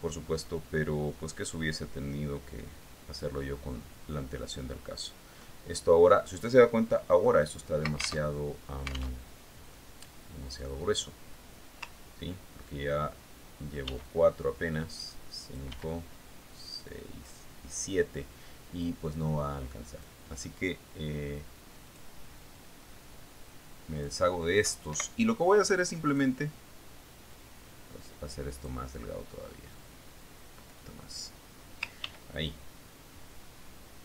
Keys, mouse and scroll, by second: 0.8 ctrl+d, 1.1-4.8 ctrl+drag, 9.7 ctrl+alt+Tab, 10.6 alt+Tab, 15.3 ctrl+d, 15.6-17.3 ctrl+drag, 17.2 ctrl+d, 17.3-19.0 ctrl+drag, 20.1-21.7 ctrl+drag, 23.4 click, 24.2-25.7 drag, 26.4 Delete, 27.6 click, 28.8-30.4 drag, 31.2-32.9 drag, 33.5 ctrl+d, 33.8-34.0 ctrl+drag.